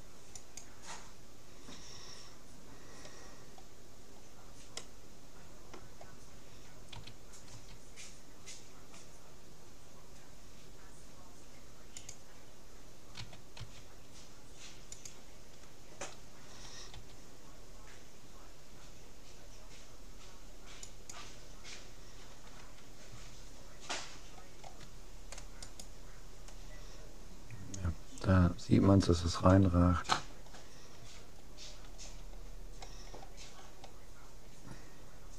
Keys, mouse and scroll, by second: 3.7 middle click, 4.3-6.5 middle drag, 6.9 s, 13.3 s, 16.9 g, 23.1 a, 23.9-25.3 middle drag, 25.7-27.3 right drag, 30.3 middle click, 31.1 a, 33.1-33.6 scroll up 1, 33.6-34.1 scroll down 1, 34.2 scroll up 1, 34.5-35.3 middle drag.